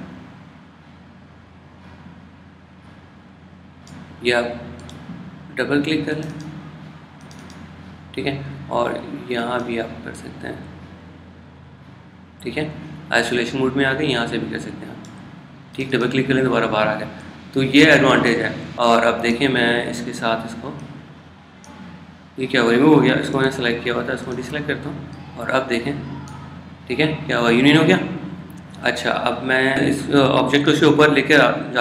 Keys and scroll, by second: 18.8 super+z, 24.5 super+z.